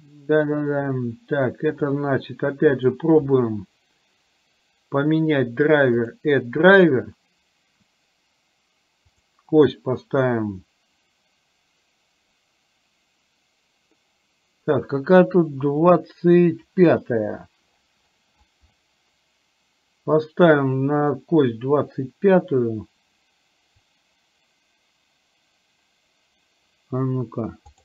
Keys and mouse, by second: 5.0-27.8 right drag.